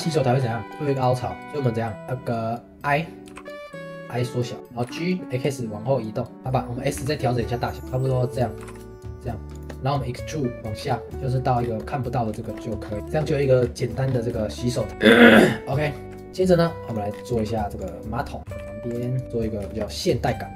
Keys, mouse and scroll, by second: 0.0-0.6 scroll up 3, 0.6 Tab, 0.7 3, 0.9 click, 4.6 middle click, 4.8 g, 6.3 shift+middle click, 6.9 s, 11.3 middle click, 11.6 scroll down 2, 11.8-12.8 middle drag, 12.8-13.1 scroll up 2, 13.1-13.6 shift+middle drag, 13.6 scroll down 1, 13.8 middle click, 14.1-14.9 scroll up 2, 14.4 shift+middle click, 14.9-15.3 shift+middle drag, 15.3-16.0 scroll down 2, 16.0 shift+a, 17.1 scroll down 3, 17.4 s, 18.4 g, 19.2-20.5 middle drag.